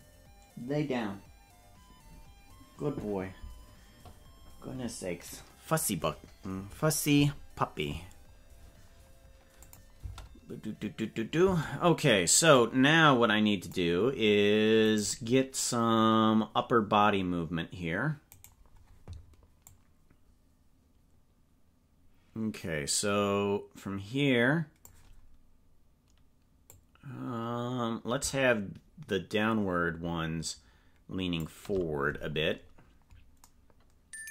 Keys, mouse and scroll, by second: 9.6 click, 10.0 space, 12.6-13.7 drag, 14.9 right click, 19.7-24.8 drag, 26.7-31.4 drag.